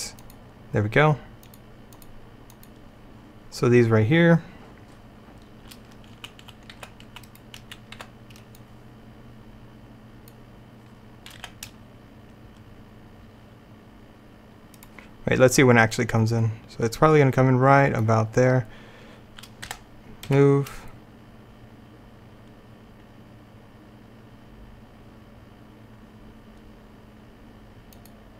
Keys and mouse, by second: 0.3-6.2 drag, 6.2-8.0 typing, 11.5 g, 16.0-17.9 drag, 19.7 g, 28.0 middle click.